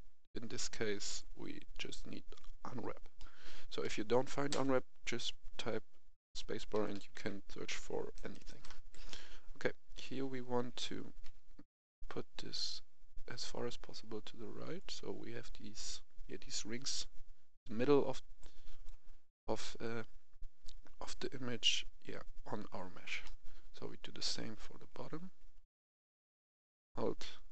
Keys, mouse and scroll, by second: 1.0 click, 3.1 middle click, 6.6-8.1 typing, 8.8 Escape, 9.9 click, 10.1 a, 11.2 g, 14.7-19.7 drag, 23.2-25.5 middle drag, 25.7 alt+right click.